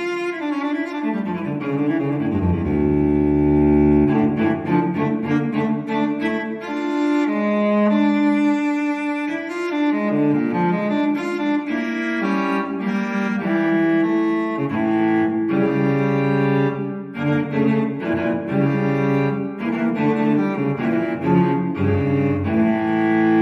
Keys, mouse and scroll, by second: 0.2-1.7 drag, 5.8 3, 6.2 0, 7.6-9.0 drag, 9.6 click, 11.3 click, 12.9 click, 14.8 click, 15.7 2, 16.3 5, 17.5 click, 19.4 click, 19.9 click, 20.6 scroll down 1, 21.1-21.4 scroll up 1, 22.5 scroll down 2.